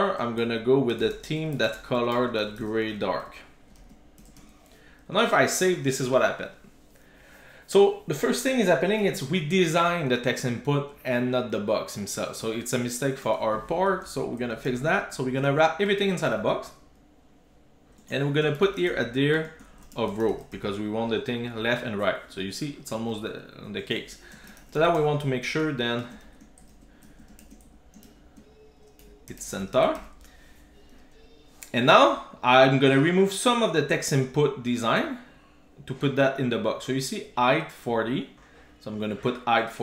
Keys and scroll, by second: 7.0 super+s, 13.9 super+x, 15.0 Tab, 15.5 super+v, 17.7 super+s, 20.6 super+s, 26.7 super+z, 29.9 super+s.